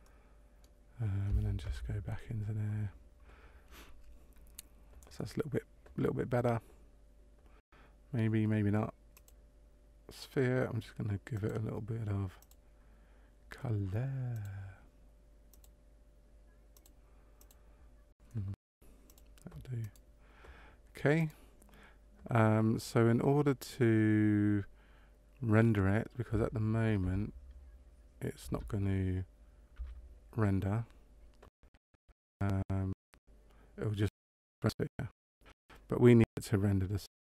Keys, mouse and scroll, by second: 0.0 middle click, 1.6 KP_0, 9.1 click, 11.3 click, 12.3 click, 14.3 click, 19.0 click, 19.8 right click, 21.1 right click, 27.0 KP_0, 28.4 KP_0, 29.8 F12.